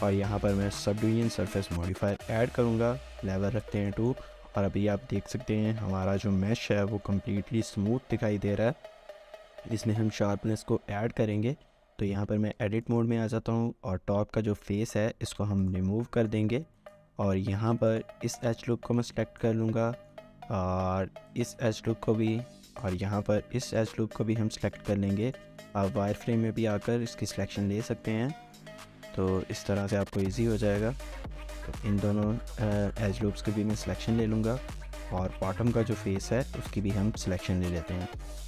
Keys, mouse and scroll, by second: 3.6 shift+middle click, 6.5 middle click, 6.8 shift+middle click, 12.1 Tab, 12.6-15.0 scroll up 3, 12.8 shift+middle click, 15.0 x, 16.1 shift+middle click, 16.5 shift+scroll up 1, 17.1-17.7 shift+scroll up 2, 17.7 2, 17.9 alt+click, 18.7 shift+middle click, 19.1 shift+middle click, 19.6 scroll down 1, 19.9 shift+middle click, 21.3 alt+shift+click, 23.9 z, 25.2 alt+shift+click, 25.7 shift+middle click, 27.7 shift+middle click, 29.0 typing, 30.3 alt+shift+click, 32.1 typing, 33.3 typing, 34.8 alt+shift+click, 35.3 alt+shift+scroll up 1, 35.6 shift+middle click, 36.0 shift+scroll up 1, 36.6 shift+scroll up 1, 37.4-38.4 scroll.